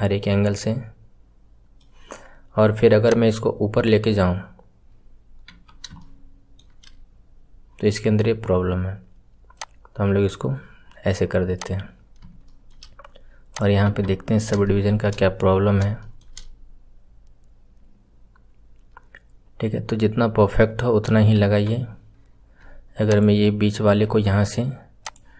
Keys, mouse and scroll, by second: 3.0-3.7 drag, 4.8-5.4 scroll down 4, 5.4 KP_1, 5.9-7.0 shift+middle drag, 7.0-9.5 scroll up 3, 9.5-10.2 drag, 11.5 click, 11.8-12.4 scroll down 1, 12.4-13.5 shift+middle drag, 13.5 click, 14.2 scroll up 3, 14.6-15.0 shift+middle drag, 15.0 scroll up 3, 16.0-19.4 shift+middle drag, 21.3 KP_1, 23.0 alt+click, 25.0 click.